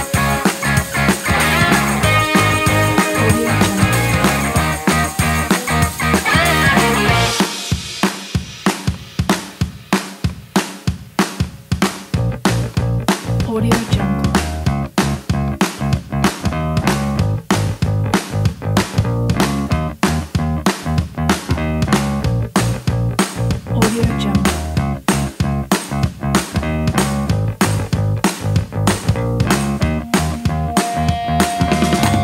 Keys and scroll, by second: 16.5 space, 17.3 space, 20.7 space, 22.0 super+z, 24.1 shift+super+z.